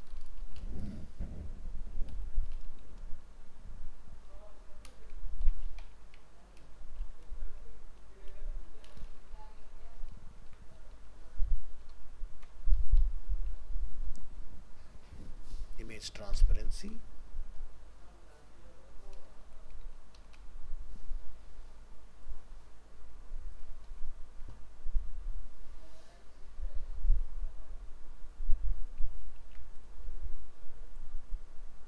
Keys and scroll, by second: 9.6 ctrl+Left, 11.9 ctrl+shift+Right, 23.9 ctrl+w, 29.2 ctrl+c.